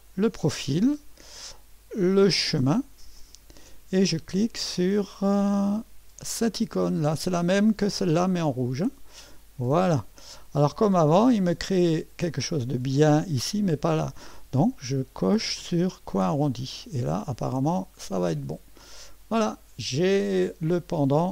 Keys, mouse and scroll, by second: 0.0 click, 1.3 Escape, 3.2 click, 9.2 click, 11.1-11.9 scroll up 1, 12.3 click, 15.2 click, 16.1 click, 17.9 click, 19.4-21.3 drag.